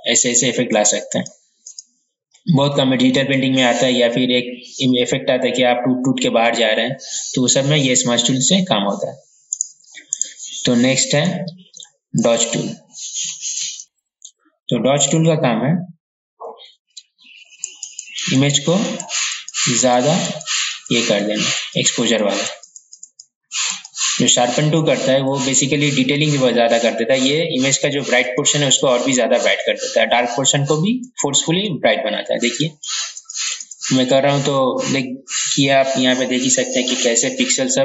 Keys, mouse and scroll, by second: 9.5-11.2 right drag, 12.2 click, 13.8 ctrl+z, 14.2 typing, 17.8-33.2 drag.